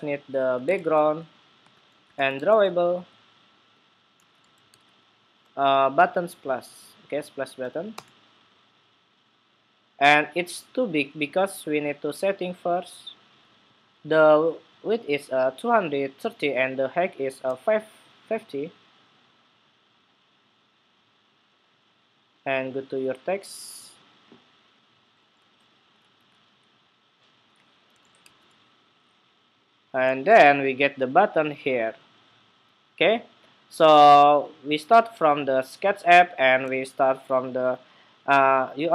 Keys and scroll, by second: 14.9 super+c, 15.1 super+c, 24.9 super+v.